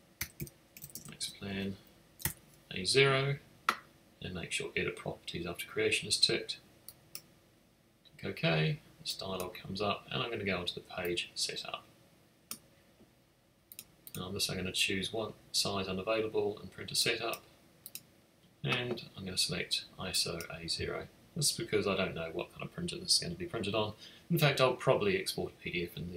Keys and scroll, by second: 0.0-2.2 typing.